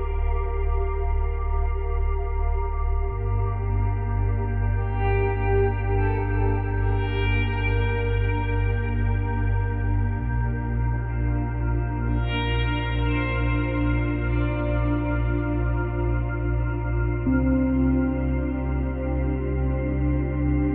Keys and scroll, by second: 1.1 space, 6.2 space, 8.2 space.